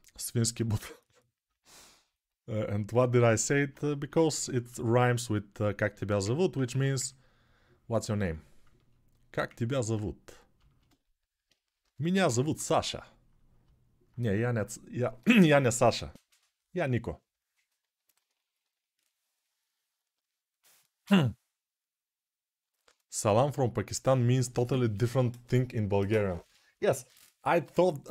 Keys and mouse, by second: 3.9 ctrl+r, 6.4 1, 8.3-27.6 ctrl+alt+drag, 11.6 g, 12.0 ], 12.2 ].